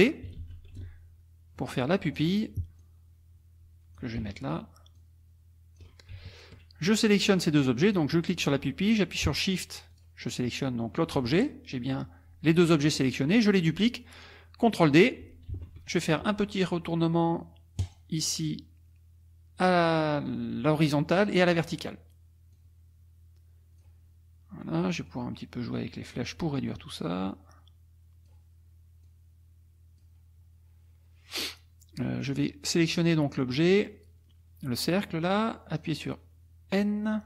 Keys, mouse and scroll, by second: 0.4 ctrl+d, 0.8-2.4 ctrl+shift+drag, 2.8-4.2 drag, 5.0 ctrl+shift+click, 6.3 ctrl+shift+click, 7.3 click, 7.8 click, 9.9 shift+click, 15.5 ctrl+d, 17.8 click, 21.4 click, 22.5-24.0 drag, 25.1-26.3 drag, 26.9-28.5 drag, 29.0-30.2 drag, 31.3 click, 32.2 click, 35.8 click.